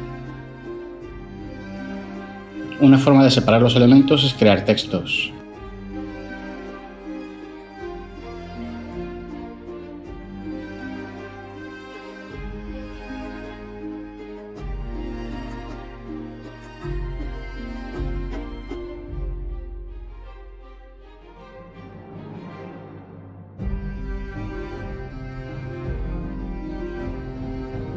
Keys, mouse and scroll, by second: 12.9-13.5 typing, 13.6 Return, 14.7-16.2 typing, 16.3 Return, 21.8-23.2 typing, 23.5 Return.